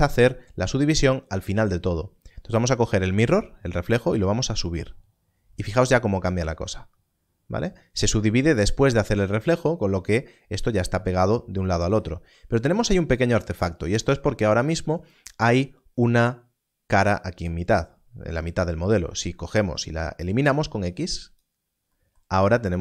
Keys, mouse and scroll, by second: 4.6 click, 12.1 click, 13.4 Tab, 18.9 x, 21.1 click, 22.2 Tab.